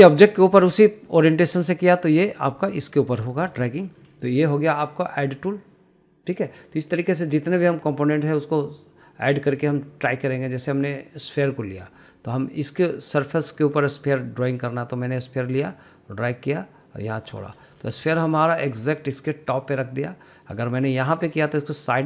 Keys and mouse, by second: 1.1 middle click, 2.0-3.9 drag, 4.3 middle click, 4.8 middle click, 5.9-7.6 drag, 8.3-12.6 drag, 14.2-17.9 drag, 18.3 middle click, 18.8 middle drag, 20.8 middle click, 21.7-22.0 drag.